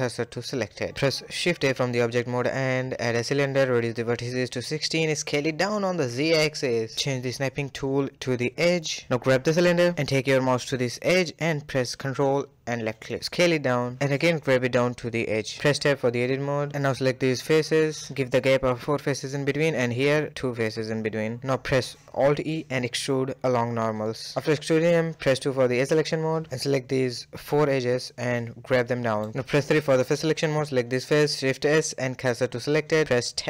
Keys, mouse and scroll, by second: 0.2 shift+a, 2.6-3.7 drag, 3.7 s, 4.8 KP_1, 5.1 scroll up 4, 5.3 g, 6.5-8.7 drag, 8.7 g, 11.9 s, 12.1 g, 13.2-14.3 middle drag, 14.7 Tab, 14.9 middle click, 15.3 click, 15.5 middle click, 16.0 shift+click, 16.1 middle click, 17.0 shift+click, 17.1 shift+click, 17.3-19.0 middle drag, 19.0 shift+click, 19.2-20.5 middle drag, 20.5 shift+click, 20.6 middle click, 21.1 scroll up 1, 21.3-22.4 shift+middle drag, 22.7 alt+e, 25.2 2, 25.4 click, 26.6 shift+click, 27.4 shift+click, 28.1 shift+click, 29.0 g, 29.9 3, 30.1 click, 30.7 shift+s, 31.9-32.3 scroll down 1, 32.3 Tab, 32.6-33.0 scroll down 1, 33.0 shift+middle click.